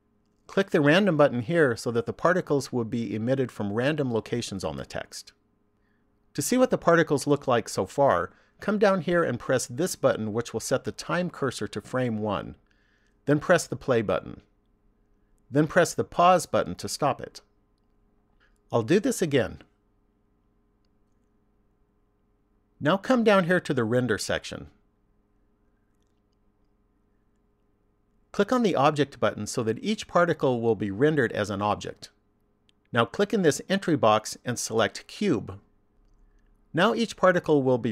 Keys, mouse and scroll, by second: 0.9 click, 9.5 click, 13.4 click, 18.0 click, 19.2 click, 20.6 click, 22.4 click, 25.5 click, 29.5 click, 33.5 click.